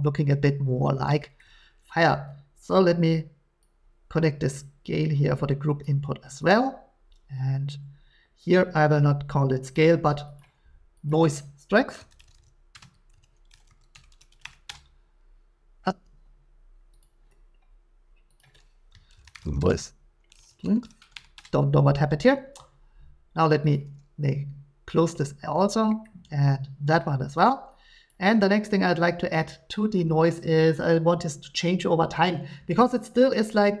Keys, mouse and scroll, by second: 1.1 shift+middle click, 5.8 click, 6.5 click, 9.7 click, 10.4 click, 11.8-16.0 typing, 14.7 Return, 17.0 click, 18.4 click, 18.9-20.8 typing, 21.3 Return, 23.4 typing, 23.7 click, 24.9 click, 26.0 middle click, 27.4 click, 28.1 click, 29.3 click.